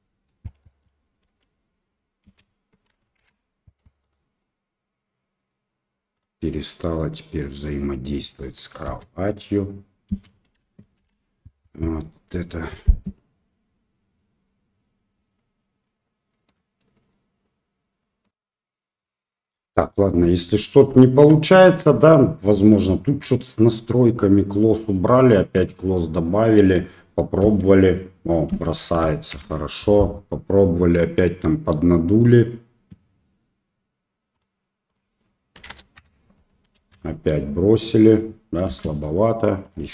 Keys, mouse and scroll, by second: 0.6 drag, 1.2 space, 2.2 space, 3.2 shift+Left, 8.2 click, 8.8 space, 10.1 space, 11.0 shift+Left, 19.9 middle click, 21.0 shift+middle click, 25.1 click, 25.8 middle click, 27.4 space, 28.6 space, 29.3 shift+Left, 34.3-36.3 drag, 36.7 space, 38.7 space, 39.8-39.9 drag.